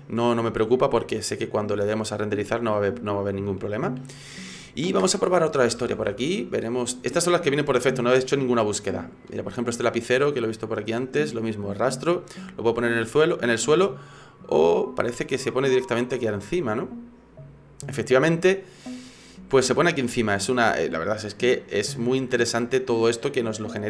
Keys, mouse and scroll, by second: 1.4 click, 3.5 shift+middle click, 18.2 middle click, 19.4 middle click, 20.0 scroll up 4, 20.3 shift+middle click, 21.4 right click, 22.4 click, 23.4 middle click.